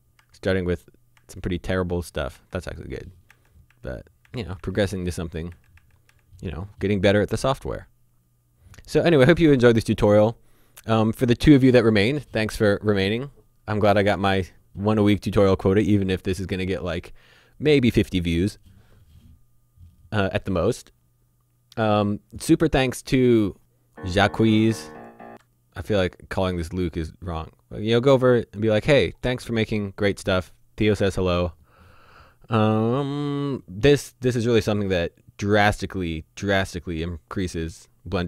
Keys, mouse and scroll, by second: 2.3 Right, 24.3-25.0 scroll down 1, 25.0 click, 26.7 click, 29.5-30.3 scroll down 1, 30.3-31.4 scroll up 1, 31.4-32.8 scroll down 1.